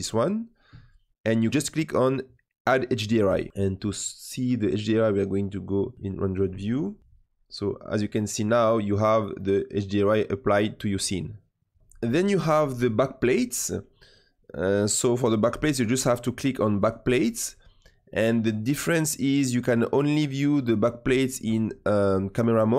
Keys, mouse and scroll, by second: 3.2-5.3 drag, 5.8 click, 7.0-11.8 middle drag, 16.8 click.